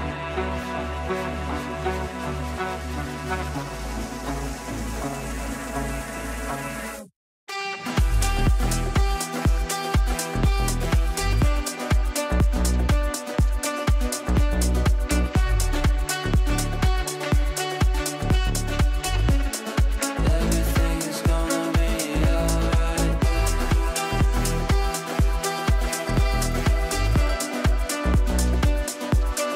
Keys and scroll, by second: 10.7 Delete, 19.4 b.